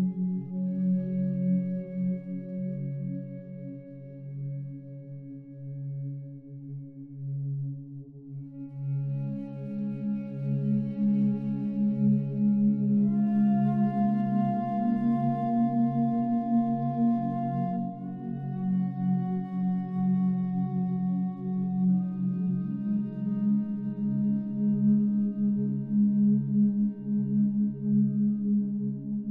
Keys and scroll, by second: 7.4 ctrl+t, 26.8 ctrl+t.